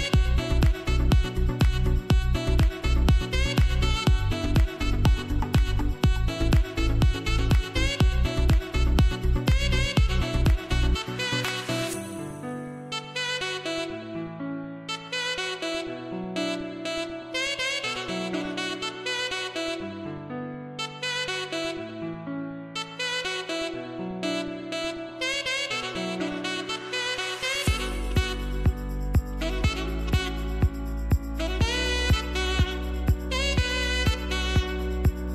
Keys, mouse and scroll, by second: 0.9 click, 1.2 space, 1.3 click, 1.7 space, 3.7 click, 22.1-24.7 drag, 24.9-25.7 typing, 26.8-31.9 drag, 32.3 click.